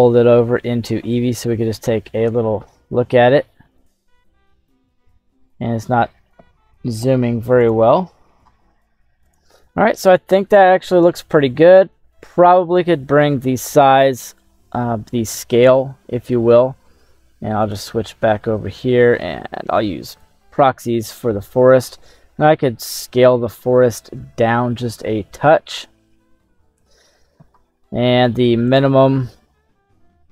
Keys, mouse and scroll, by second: 1.4-2.8 middle drag, 3.8-5.7 ctrl+middle drag, 6.7 /, 7.9 right click, 9.3 click, 15.8-16.3 scroll down 2, 16.3 middle click, 17.8 click, 19.2 middle click, 20.2 click, 21.4 middle click, 22.0 middle click, 22.8 scroll up 2, 23.3-24.8 scroll up 1, 24.8-26.9 middle drag, 28.7-30.3 drag.